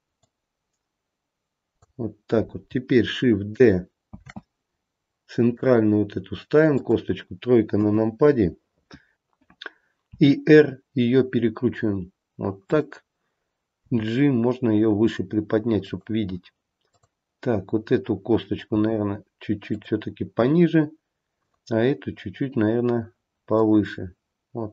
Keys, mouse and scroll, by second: 0.4 click, 4.3 shift+d, 7.9 KP_3, 10.2 r, 14.0 g, 17.0 click, 18.9 g, 21.4 click, 23.6 click.